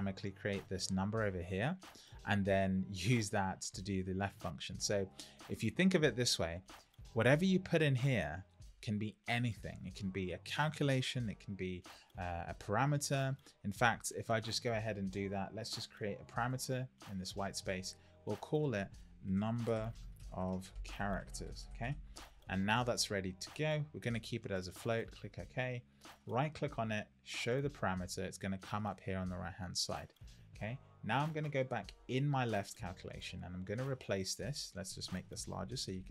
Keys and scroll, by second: 19.2 shift+n, 35.7 super+=.